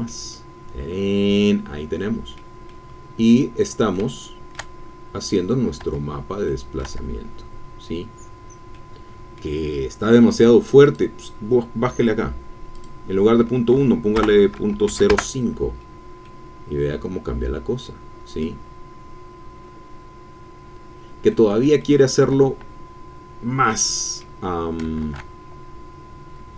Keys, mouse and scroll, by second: 2.6 middle click, 3.5-4.1 scroll up 1, 4.1 shift+middle click, 4.8-5.7 shift+scroll up 1, 5.8 Tab, 6.5 middle click, 6.5-7.5 drag, 6.9 Tab, 8.1-8.7 scroll down 4, 8.7 click, 9.8 scroll up 2, 10.1-10.4 scroll down 2, 10.8 click, 11.8-12.1 scroll down 1, 12.7 click, 13.8 Right, 14.2 BackSpace, 14.7 KP_0, 15.1 KP_Enter, 16.3-18.6 middle drag, 18.6-19.8 scroll down 1, 19.8-21.0 scroll down 1, 21.3-22.4 middle drag, 22.4-23.1 shift+scroll up 1, 23.1-23.6 scroll down 1, 23.6 middle click, 25.0 shift+a.